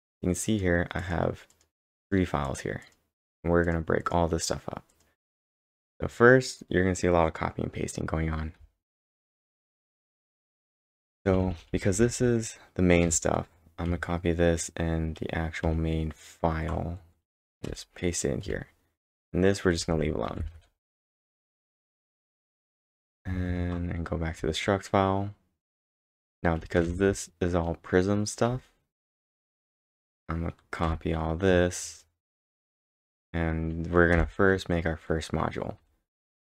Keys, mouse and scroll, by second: 0.5 click, 0.5 scroll up 1, 1.0 click, 1.5 click, 2.0 click, 4.9 click, 5.5 click, 6.1-7.3 scroll down 5, 8.3-11.6 typing, 8.6 scroll down 1, 9.7 scroll down 2, 13.9 typing, 15.6 ctrl+Tab, 15.6 typing, 17.7 p, 19.8-21.0 typing, 21.4 ctrl+Tab, 22.7 ctrl+Tab, 23.1 ctrl+Tab, 23.3 ctrl+Tab, 24.4-29.0 typing, 25.8 ctrl+Tab, 30.6-31.4 typing, 31.8 ctrl+Tab, 32.4 ctrl+Tab, 32.4 typing, 33.9-34.6 typing, 35.9-36.5 typing.